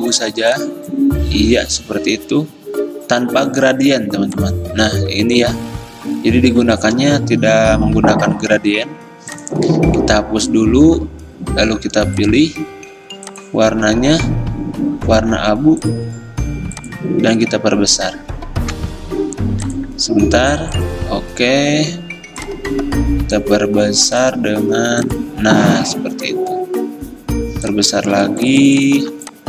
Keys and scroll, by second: 18.8 v.